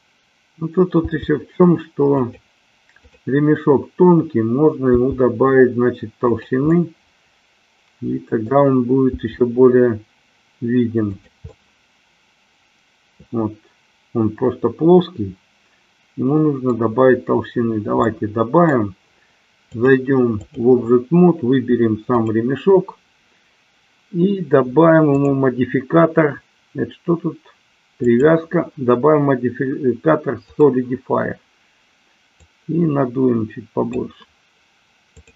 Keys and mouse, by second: 1.3 g, 2.3 click, 3.0-4.3 drag, 5.0 g, 6.4 click, 6.8-8.5 middle drag, 9.3 g, 11.5-16.8 middle drag, 18.0 middle click, 19.9 click, 22.2 click, 25.0 click, 28.2-30.7 drag, 32.4-33.9 drag, 35.2-35.3 drag.